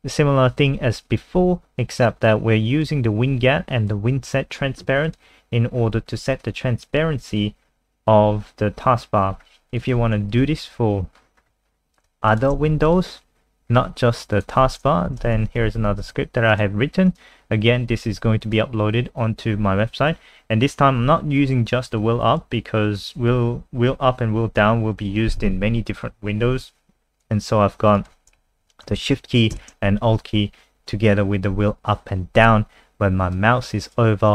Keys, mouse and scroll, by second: 5.7-6.4 scroll down 5, 6.4 click, 6.8 scroll down 2, 8.0 scroll down 2, 9.3 scroll up 2, 9.7 click, 10.4 Up, 10.4 Right, 11.1-11.7 scroll down 10, 12.3 shift+click, 12.7 ctrl+c, 12.8 click, 13.7 scroll up 3, 14.3 click, 15.1 Right, 15.3 ctrl+shift+End, 15.7 ctrl+v, 16.0 ctrl+s, 16.5 click, 17.6 scroll up 2, 18.4 click, 28.5 Home, 29.0 shift+Right, 32.3 click.